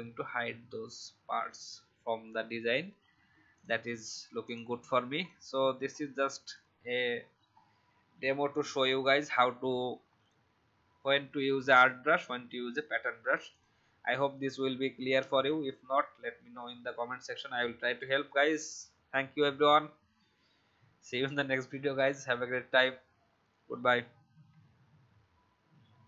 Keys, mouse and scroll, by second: 2.1 v, 2.9 alt+scroll down 1, 3.5 click, 5.8-6.5 alt+scroll down 1, 6.5 click, 7.4 alt+scroll up 1, 10.0-11.6 scroll up 1, 13.4 click.